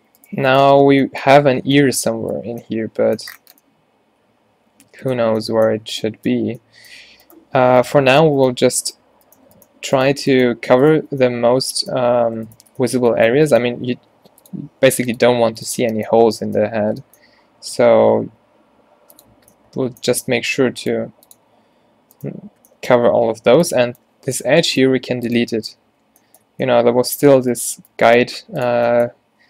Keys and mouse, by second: 0.8 f, 1.4 Tab, 6.0 Tab, 9.2 a, 14.0 e, 14.7 s, 15.4 g, 15.8 Tab, 17.8 Tab, 18.3 e, 19.4-21.7 typing, 23.2-26.5 typing, 28.3 x.